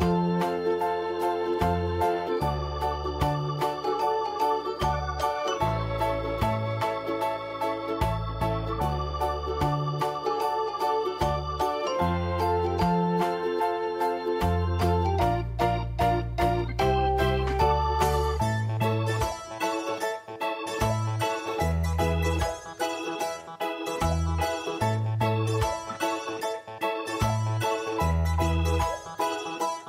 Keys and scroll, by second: 1.0 ctrl+space, 1.9 v, 4.6 ctrl+t, 10.3 ctrl+space, 12.4 w, 15.6 e, 15.9 Return, 16.5 Delete, 17.5 ctrl+d, 17.5 ctrl+space, 18.0 ctrl+space, 18.5 ctrl+space.